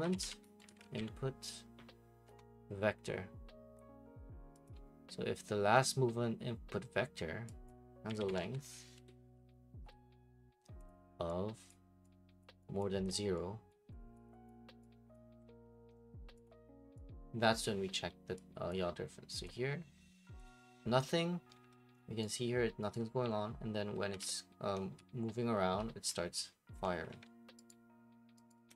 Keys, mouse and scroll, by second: 0.0-26.8 typing, 4.6-6.8 drag, 7.7 click, 10.9 click, 11.7 click, 12.4 click, 12.8 click, 13.7 click, 14.1 click, 14.5 click, 15.1 click, 16.5 click, 17.6 click, 18.7 click, 19.4 click, 20.5 click, 21.6 alt+Tab, 22.2 click, 22.9 click, 27.1 alt+Tab, 27.7 right click, 27.8 middle click, 28.0 middle click, 28.5 right click.